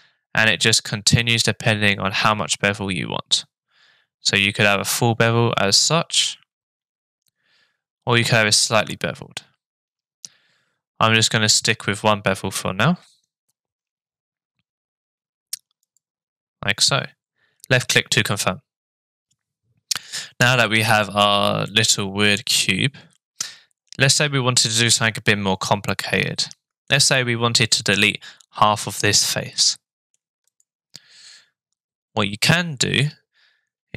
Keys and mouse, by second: 21.7-24.8 middle drag, 25.9 middle click, 29.6 middle click, 30.6 click, 31.0-33.9 middle drag.